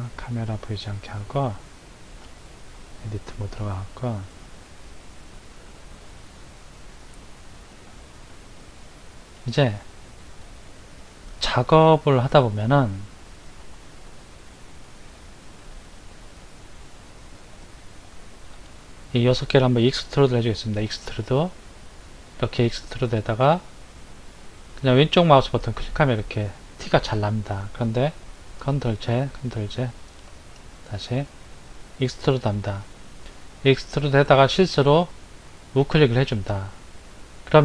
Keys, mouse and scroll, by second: 0.7-1.2 scroll up 3, 2.0 Tab, 3.0-3.5 scroll up 1, 3.5-4.4 shift+middle drag, 4.4-5.4 scroll up 6, 5.8-6.9 middle drag, 6.9-8.7 scroll up 9, 8.7-9.3 scroll up 1, 9.3-11.2 shift+middle drag, 11.2-11.9 scroll up 2, 13.4 3, 14.9 click, 16.1 shift+click, 16.7 shift+click, 17.3 shift+click, 17.8 shift+click, 18.3 shift+click, 20.6 e, 28.5 ctrl+z, 29.1 ctrl+z, 30.9 shift+click, 32.2 e.